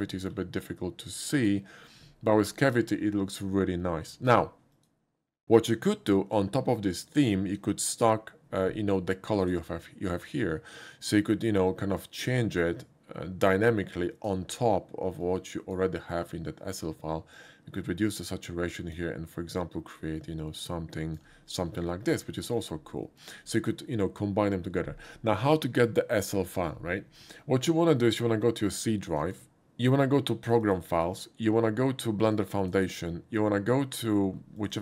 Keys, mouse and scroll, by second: 0.0 middle click, 1.4 click, 2.6 click, 4.8 click, 7.8 click, 9.4 click, 11.7-14.3 drag, 15.2 click, 17.3-18.9 drag, 19.9-21.2 drag, 21.9 middle click, 22.2 middle click, 23.1 middle click, 30.5 click, 30.6 click, 32.3 click, 32.6 click, 34.6 click, 34.7 click.